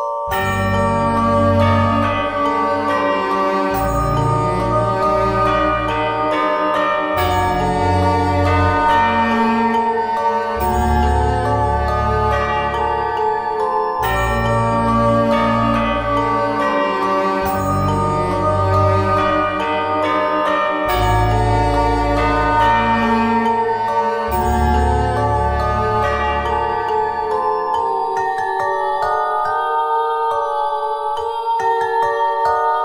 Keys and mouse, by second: 0.0 z, 1.0 KP_1, 2.3 z, 12.6 middle click, 18.7 middle click, 18.9 z, 28.0 e, 32.7 middle click.